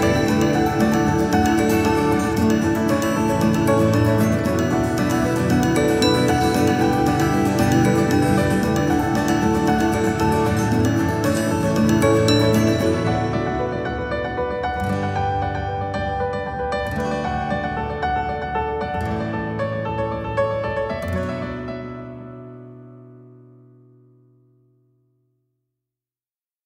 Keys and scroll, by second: 1.5 ctrl+z, 23.5 shift+Up, 24.0 Down.